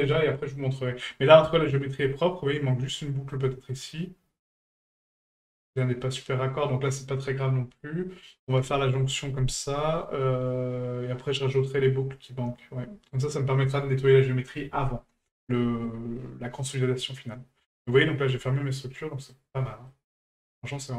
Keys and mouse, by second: 1.0 middle drag, 1.6 shift+middle drag, 2.9-3.3 shift+middle drag, 13.1-15.8 middle drag, 16.6-17.8 middle drag, 18.5-19.3 middle drag, 19.9-20.2 shift+middle drag, 20.3-20.9 middle drag.